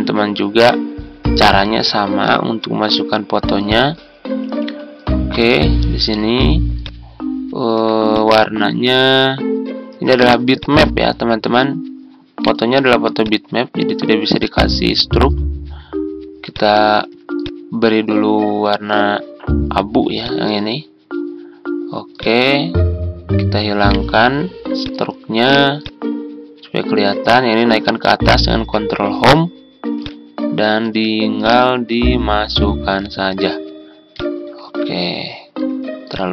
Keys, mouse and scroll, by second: 28.4 Home.